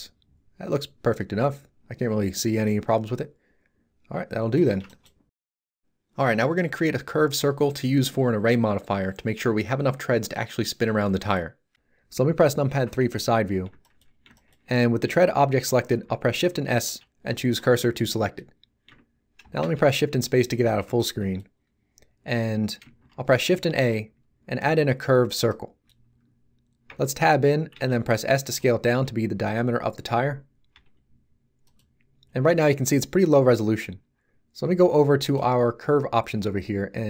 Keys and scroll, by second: 12.8 3, 16.7 shift+s, 19.4 shift+space, 23.6 shift+a, 26.9 Tab, 27.7 s.